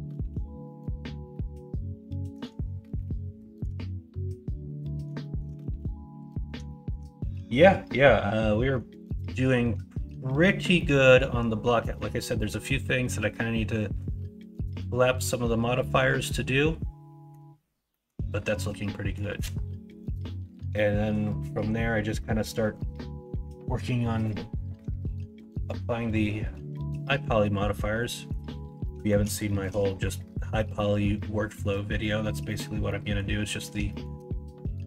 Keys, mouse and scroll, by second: 1.3-2.3 middle drag, 2.9-3.4 shift+middle drag, 4.1-4.8 middle drag, 5.2 shift+middle drag, 5.7-6.4 middle drag, 6.6 shift+middle drag, 8.5 middle drag, 10.7-11.2 middle drag, 12.3 middle drag, 15.8-17.3 middle drag, 17.9 middle drag, 18.5-19.1 middle drag, 21.7-22.7 middle drag, 27.0-27.8 middle drag, 28.0 middle click, 28.8 middle drag, 29.4 shift+middle drag, 29.8-31.0 middle drag, 31.7-32.0 middle drag, 32.8-33.1 middle drag, 33.6 middle click, 33.8 shift+middle drag.